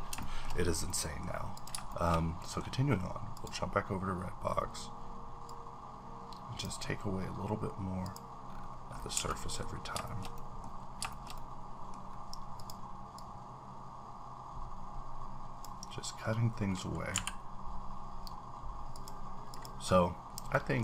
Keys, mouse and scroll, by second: 0.2 shift+middle click, 0.4-1.5 shift+scroll up 2, 0.9 middle click, 1.5 click, 2.4 shift+middle click, 3.3 click, 5.8-6.7 drag, 7.2-8.0 scroll down 3, 8.0 click, 8.5-9.1 scroll up 7, 9.1 a, 9.3 middle click, 9.6 scroll down 1, 10.0 shift+middle click, 10.8 scroll down 2, 11.1 shift+middle click, 12.1-12.5 scroll up 1, 12.5 click, 12.7 click, 12.7-13.1 scroll up 1, 13.2-18.9 drag, 17.1 b, 19.5 click, 20.2-20.5 scroll down 1, 20.5 middle click.